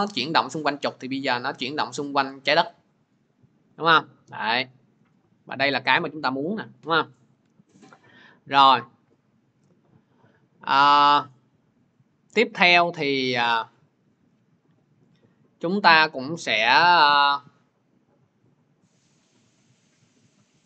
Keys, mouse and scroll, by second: 5.8 click, 6.8 ctrl+z, 11.9 scroll, 12.9-13.3 scroll, 17.7 middle click, 17.8-20.6 drag.